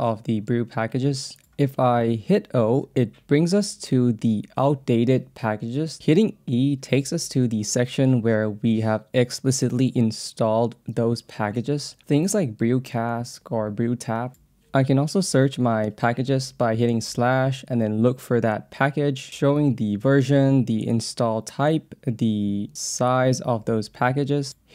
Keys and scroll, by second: 0.0 j, 1.4 k, 2.4 o, 3.0 j, 4.0 k, 5.0 j, 5.6 k, 6.3 e, 7.9 j, 9.9 k, 13.6-15.1 typing, 16.1-17.5 typing, 18.5 e, 20.1 BackSpace, 22.2 e, 22.8 l, 24.4 Tab.